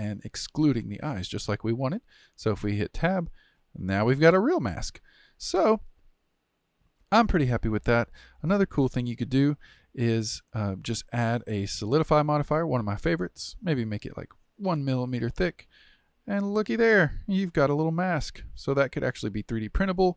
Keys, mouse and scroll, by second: 1.1-3.0 middle drag, 3.0 Tab, 3.6-9.4 middle drag, 9.4 click, 11.1 click, 12.2-15.7 drag, 15.7-16.7 middle drag, 16.7-17.0 scroll up 4, 17.0-19.8 shift+middle drag, 19.8 scroll down 1, 20.0-20.1 shift+middle drag.